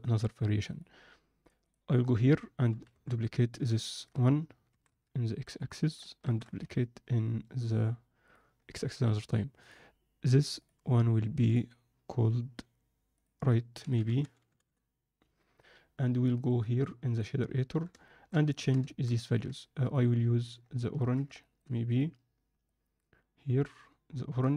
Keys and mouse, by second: 1.7-2.7 drag, 2.7 KP_0, 2.8 KP_7, 3.9 ctrl+middle click, 4.8 shift+d, 6.3 shift+d, 9.5-14.5 drag, 16.4-17.1 drag, 18.0 alt+shift+middle click, 18.5 ctrl+middle click, 18.8 alt+shift+middle click, 19.2 ctrl+alt+middle click, 19.8-20.6 drag, 20.7 ctrl+middle click, 21.3 shift+middle click, 21.8-24.5 drag.